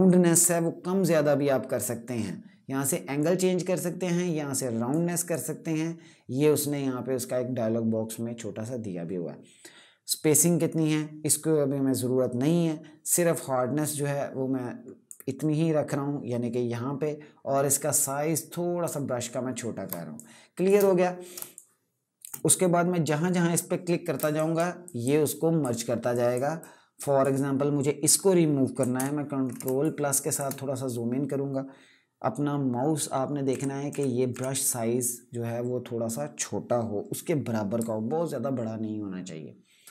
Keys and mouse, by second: 2.9 click, 13.1 click, 17.6 click, 19.6 space, 19.9 click, 20.1 space, 21.2 click, 21.6 space, 24.1 click, 24.4-26.4 typing, 24.5 click, 24.9 click, 25.8 click, 26.3 click, 28.7 ctrl+KP_Add, 29.3 space, 29.5 click, 29.8 space, 33.2-34.0 typing, 37.5 [.